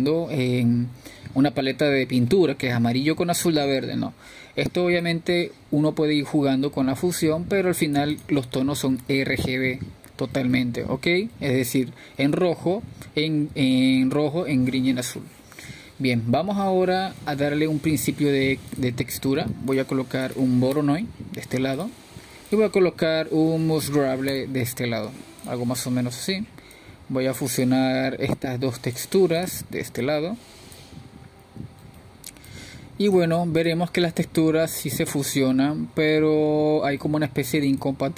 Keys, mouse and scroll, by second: 11.4-16.9 drag, 16.9-22.0 middle drag, 22.0-24.0 drag, 24.0 shift+a, 27.6 shift+a, 30.0 click, 31.5 click, 35.7 click, 36.9-37.5 drag, 37.5-38.1 middle drag.